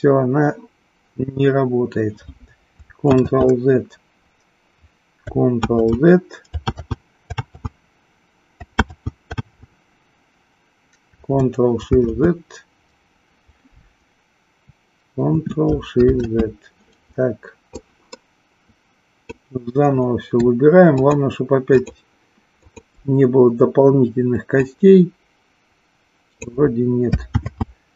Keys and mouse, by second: 2.9 ctrl+z, 5.6 ctrl+z, 7.3 ctrl+z, 11.8 ctrl+z, 16.0 ctrl+shift+z, 17.7-19.3 drag, 21.0 shift+click, 21.6 shift+click, 22.6 shift+click, 24.5-26.6 drag, 27.3 ctrl+z.